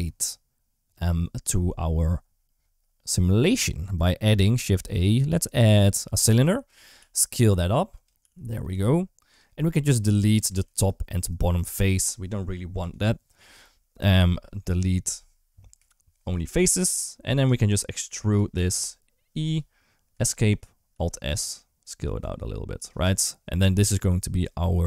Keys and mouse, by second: 4.4 shift+a, 6.8 s, 8.0 g, 8.5 s, 10.2 Tab, 10.4 3, 12.6 Delete, 13.9 ctrl+z, 15.6 Delete, 17.1 a, 19.3 e, 20.7 alt+s, 22.9 Tab, 23.9-24.8 middle drag.